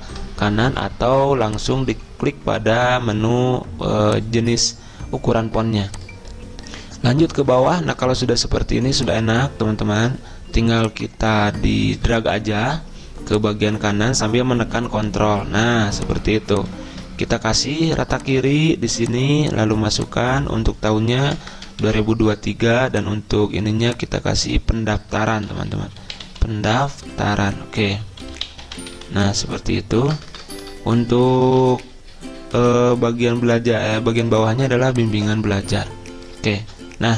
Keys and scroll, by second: 17.0 ctrl+a, 21.1-22.4 typing, 25.2-33.8 typing, 36.7 ctrl+c.